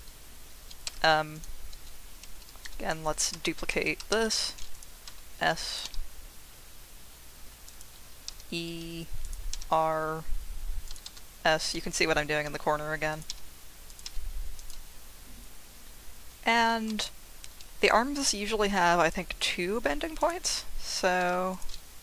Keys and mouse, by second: 0.8 2, 1.3 click, 2.6 shift+s, 4.1 shift+d, 4.7 click, 5.1 s, 5.7 click, 5.8 g, 7.6 click, 9.2 click, 9.5 r, 10.8 click, 11.0 s, 11.6 click, 13.1 click, 13.9 click, 14.0 g, 14.6 click, 16.9 ctrl+r, 20.2 click, 21.2 ctrl+r.